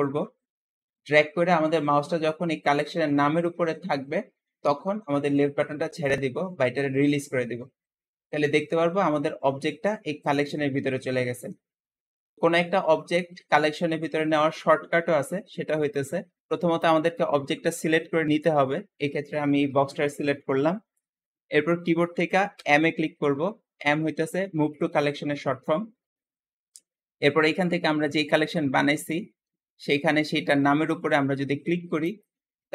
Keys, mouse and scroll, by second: 15.6 click, 22.4 m.